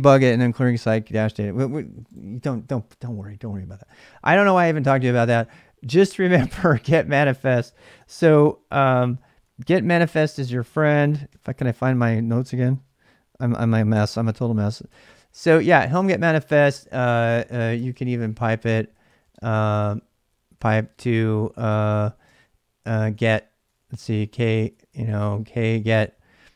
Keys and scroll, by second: 7.6 ctrl+a, 8.0 1, 9.1 ctrl+a, 9.4 2, 10.8 ctrl+a, 11.1 3, 11.8 ctrl+a, 13.8 4, 14.8 ctrl+[, 14.8-16.1 typing, 17.1-26.1 typing.